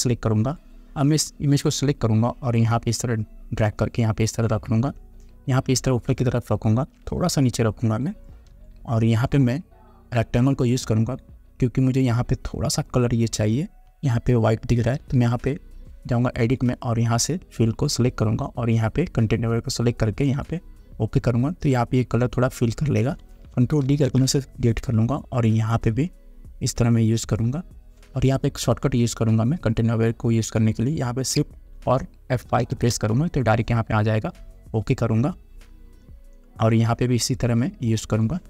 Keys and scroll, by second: 8.7 Return, 13.8 Up, 24.0 ctrl+d, 32.6 shift+F5.